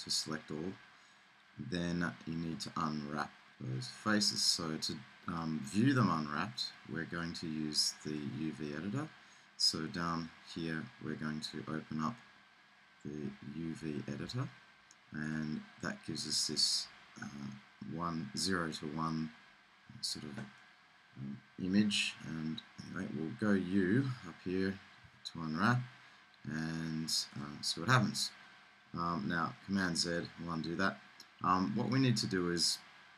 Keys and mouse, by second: 13.4-18.9 middle drag, 25.0 u, 29.8 super+z.